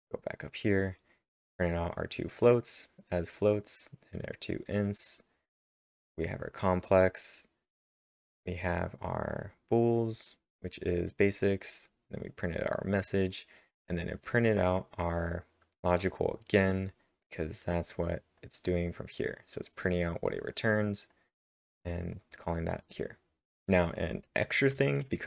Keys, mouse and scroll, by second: 0.0-0.1 typing, 1.9 scroll up 7, 14.4 click, 14.4-15.2 scroll up 1, 18.4-20.4 drag, 18.4 scroll down 1, 20.4-21.6 drag, 21.6 click, 22.1-23.5 drag, 23.6 click, 23.6 click, 23.6 scroll up 1.